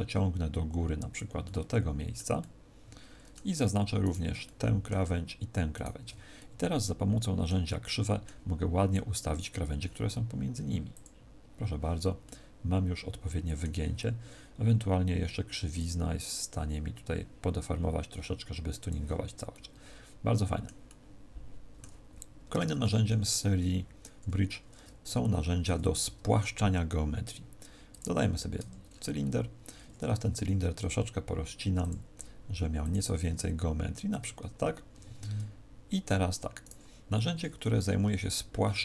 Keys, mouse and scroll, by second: 1.4 middle click, 2.3 middle click, 4.0 alt+shift+right click, 4.4 middle click, 5.7 alt+shift+right click, 6.3 middle click, 7.6 middle click, 10.8 click, 12.2 middle click, 15.7 click, 19.4 middle click, 20.8 middle click, 22.5 Tab, 23.0 x, 25.6 shift+a, 28.5 Tab, 28.8-29.1 scroll up 1, 30.1 w, 32.5 w, 34.2 Tab, 34.8 Tab, 35.1 middle click, 36.6 right click, 37.6 c.